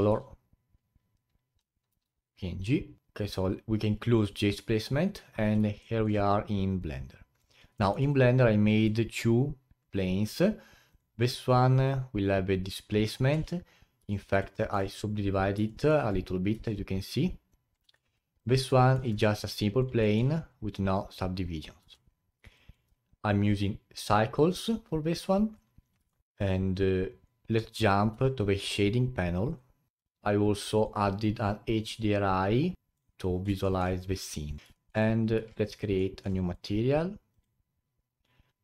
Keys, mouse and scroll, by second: 5.8-6.3 alt+middle drag, 6.3-7.8 alt+drag, 7.8 alt+middle click, 8.1-11.0 alt+drag, 13.3 Tab, 14.1 alt+click, 14.5 alt+middle click, 14.9-15.7 scroll up 8, 15.7 alt+middle click, 16.5 a, 17.3 scroll down 3, 17.8 Tab, 18.0 scroll down 2, 18.4 click, 18.7 alt+middle click, 19.1 Tab, 19.4 alt+click, 20.0 alt+middle click, 20.4-20.9 scroll up 3, 21.8 Tab, 22.2-22.6 scroll down 2, 22.6-26.1 alt+drag, 26.1-28.1 alt+middle drag, 28.1 a, 29.5 click, 29.9-33.6 alt+drag, 33.6-34.0 alt+middle drag, 34.0 alt+click, 34.7-35.1 alt+middle drag, 35.1-35.4 scroll up 2, 35.6-36.0 alt+drag, 36.0-36.4 alt+middle drag, 36.4-38.5 alt+drag, 38.5 scroll down 5.